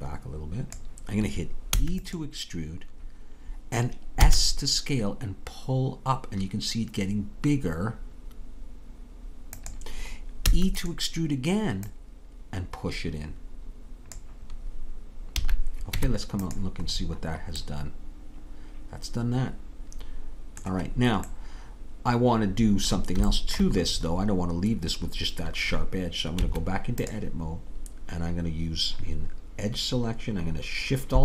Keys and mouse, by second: 1.8 e, 4.2 s, 10.5 e, 11.9-14.0 drag, 15.4 a, 16.0 Tab, 18.3 middle click, 23.4-26.0 middle drag, 26.4 Tab.